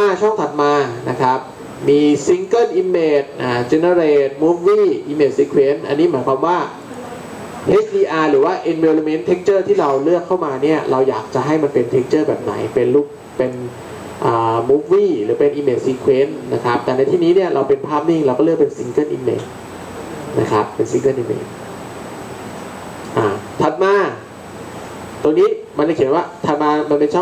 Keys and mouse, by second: 2.1-6.8 drag, 6.8-22.0 drag.